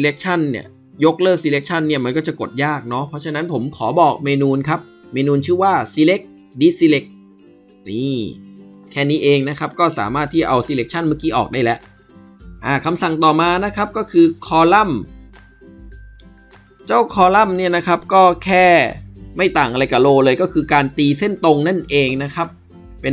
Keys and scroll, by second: 15.9 ctrl+b.